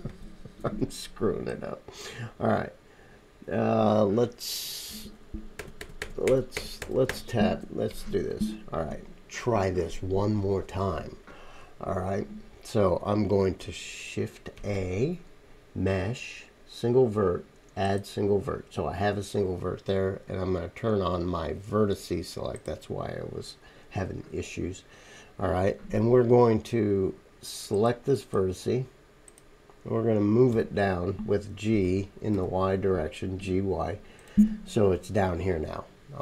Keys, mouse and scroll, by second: 0.1 ctrl+z, 5.6 ctrl+z, 5.8 ctrl+z, 5.8 ctrl+click, 5.8 ctrl+middle click, 5.8 ctrl+right click, 6.0 ctrl+z, 6.2 ctrl+z, 6.5 ctrl+z, 6.8 ctrl+z, 7.1 ctrl+z, 14.6 shift+a, 19.3-22.4 drag, 19.3-22.4 middle drag, 19.3-22.4 right drag, 22.9 click, 22.9 middle click, 22.9 right click, 27.6 click, 27.6 middle click, 27.6 right click, 29.3-36.2 right drag, 30.5 g, 30.9-33.5 middle drag.